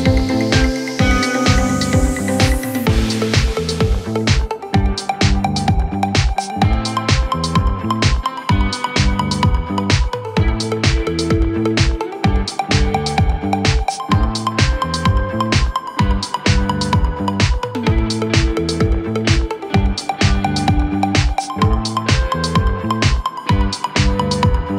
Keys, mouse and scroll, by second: 2.3 Tab, 3.4-3.7 drag, 3.7 scroll down 1, 4.0-4.6 middle drag, 4.6-5.2 scroll up 4, 5.2-6.9 middle drag, 6.9 click, 7.4-7.7 scroll down 3, 7.7-8.5 middle drag, 8.5-9.7 scroll down 1, 9.7-11.4 scroll up 1, 11.4-16.8 drag, 16.8 KP_Divide, 17.1 KP_1, 17.8 scroll down 1, 18.1 Tab, 18.4 2, 19.5 click, 19.8 click, 20.1-20.8 scroll down 2, 20.8 s, 23.2 s, 24.5 Tab.